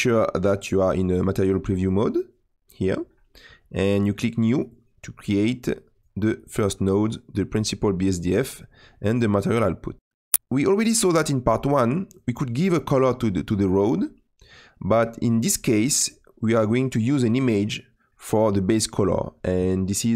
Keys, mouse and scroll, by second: 4.7 click, 6.9 click, 11.8 click, 14.3 click, 18.3 click.